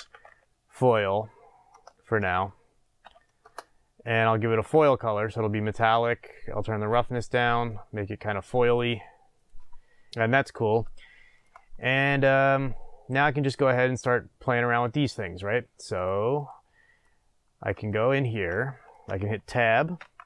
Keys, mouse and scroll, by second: 3.4-11.0 drag, 3.5 Return, 11.0-16.0 shift+middle drag, 11.7-12.5 scroll up 2, 12.5-16.0 scroll up 1, 16.0 click, 17.0-20.2 middle drag, 20.0 Tab.